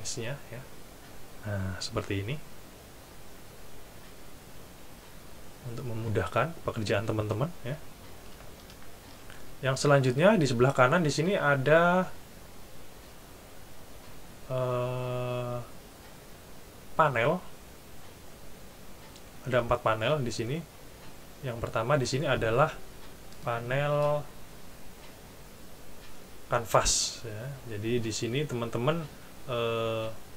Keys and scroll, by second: 8.7 shift+super+F11.